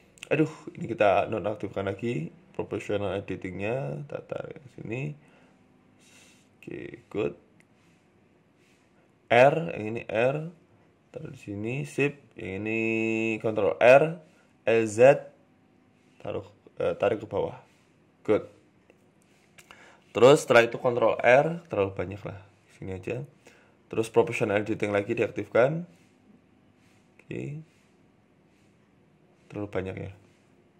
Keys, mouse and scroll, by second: 0.9 click, 1.0 s, 2.1-2.6 scroll down 3, 2.3 s, 3.5 s, 4.7 g, 6.3-7.7 scroll up 4, 6.5 shift+middle click, 7.8 a, 8.0 a, 8.6 l, 9.5 r, 12.0-12.6 scroll up 3, 12.0 g, 12.3 shift+middle click, 13.3 ctrl+r, 14.2 s, 15.6 click, 15.8-16.5 scroll down 6, 16.0 shift+middle click, 16.5 g, 17.9 Tab, 18.2 middle click, 18.2-18.5 scroll down 2, 19.7-20.1 scroll up 3, 20.0 Tab, 20.5 ctrl+r, 22.5 KP_3, 23.2 click, 24.4 click, 24.9 g.